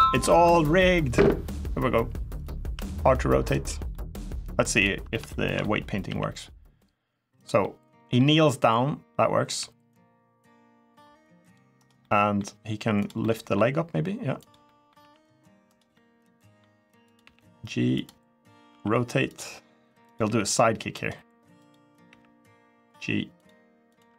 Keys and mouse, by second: 2.1 click, 2.5 r, 3.3 right click, 3.7 middle click, 5.1-5.4 shift+middle drag, 5.8 g, 7.1 click, 7.4-7.9 middle drag, 9.2 g, 11.5 right click, 11.8 middle click, 12.7 click, 13.0-13.3 middle drag, 13.4 g, 14.1 click, 14.4 middle click, 14.8 r, 15.4 right click, 15.7-16.3 middle drag, 16.9 click, 17.0 g, 17.7 click, 18.5 r, 19.0 click, 19.9 click, 20.0 g, 20.7 right click, 21.8 g, 23.1 click, 24.0 r.